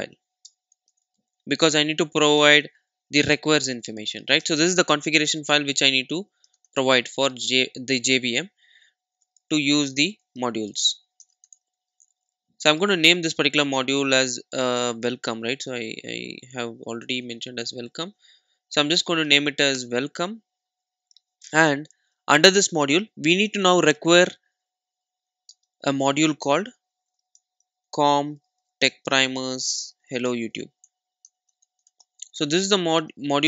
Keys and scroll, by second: 22.1 alt+super+l.